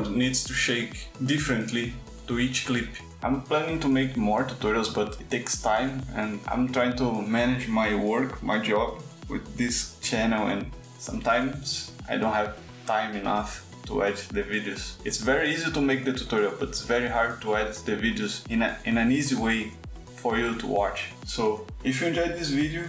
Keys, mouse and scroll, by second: 2.5 click, 8.3 click, 19.6 click.